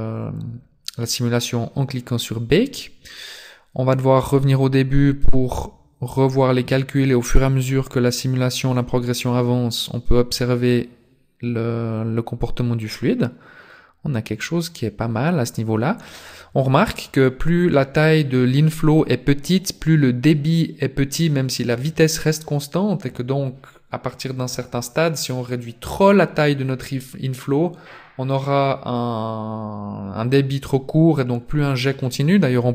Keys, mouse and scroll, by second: 4.2 click, 32.4 scroll up 1.